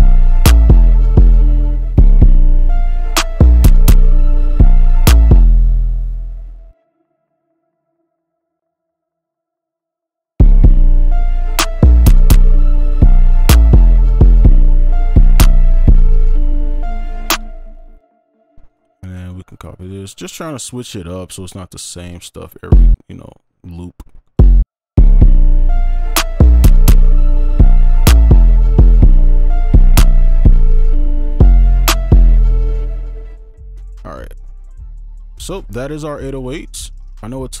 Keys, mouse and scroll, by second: 1.7 space, 1.9 space, 2.6 ctrl+click, 4.2 ctrl+click, 6.1 ctrl+click, 7.1 shift+click, 9.3 right click, 9.6 ctrl+click, 10.4 space, 12.2 right click, 14.5 double click, 14.8 right click, 17.3 space, 18.7 ctrl+click, 22.2 shift+right click, 25.0 space, 25.4 ctrl+right click, 33.2 space, 34.2 right click, 35.0 alt+click, 35.8 right click, 36.6 double click.